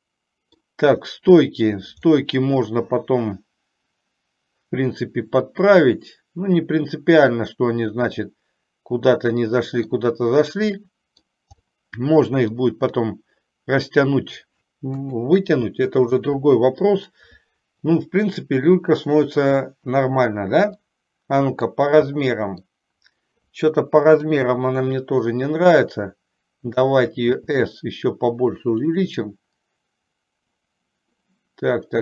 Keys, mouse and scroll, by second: 2.2-9.9 middle drag, 10.9 middle click, 11.9 middle click, 13.2-14.7 middle drag, 15.2 KP_3, 16.4 KP_1, 20.9 scroll up 1, 21.2 middle click, 22.3 middle click, 24.3 KP_7, 27.4 s.